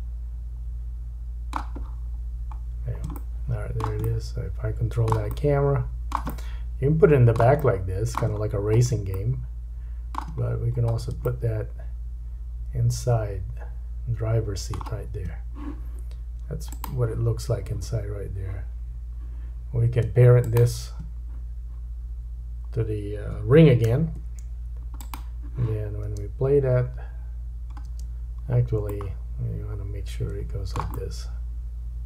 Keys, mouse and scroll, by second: 1.9-2.6 scroll down 5, 2.8-3.2 scroll up 2, 3.2-10.3 shift+drag, 3.2 shift+middle click, 4.1 middle click, 5.4 middle click, 6.4 middle click, 7.7 middle click, 8.5-9.0 scroll up 2, 9.2 shift+middle click, 10.5-11.2 scroll up 1, 11.3 shift+middle click, 16.7 click, 20.4 shift+click, 23.8 ctrl+p, 26.1 space, 27.9 space, 28.8 middle click, 30.9 shift+middle click, 30.9-31.9 shift+scroll up 1.